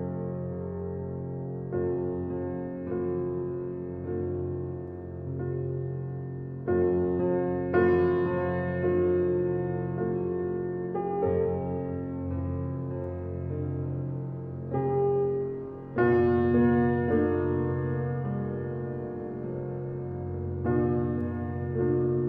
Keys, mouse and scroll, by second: 2.9-3.3 scroll down 4, 3.3-3.7 middle drag, 3.7-4.1 scroll down 1, 4.1-4.5 drag, 4.5 scroll down 4, 4.8-5.1 middle drag, 5.1 click, 5.3 scroll down 1, 5.5 click, 5.7 click, 6.1-7.0 right drag, 7.0 click, 7.4 click, 8.2-8.5 scroll down 3, 8.5-8.9 middle drag, 8.9 click, 9.0 scroll down 1, 9.3-10.5 middle drag, 10.5-11.1 scroll up 7, 11.1-11.5 middle drag, 11.5-12.1 scroll down 7, 12.1-13.6 middle drag, 13.7-14.8 middle drag, 14.8-15.4 scroll up 4, 15.4 click, 16.0 shift+click, 16.5 shift+d, 20.3-21.4 middle drag, 21.4 g.